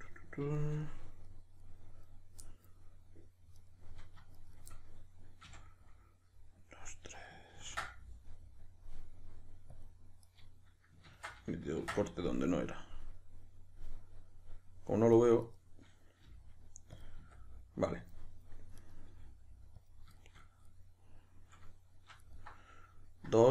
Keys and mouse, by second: 3.6 right click, 4.4 shift+right click, 4.7-10.4 middle drag, 5.4 f, 10.4 right click, 11.1 ctrl+z, 15.5 right click, 16.3 g, 17.0 click, 17.2 s, 18.1 click, 18.8 right click, 19.1 g, 19.9 click, 20.2-22.2 shift+middle drag, 22.2 alt+right click.